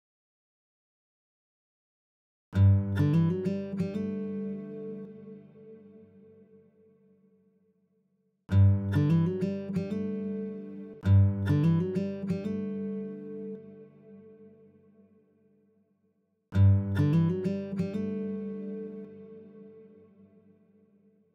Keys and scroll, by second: 2.6 space, 8.3 space, 10.9 space, 15.9 super+z, 16.3 space.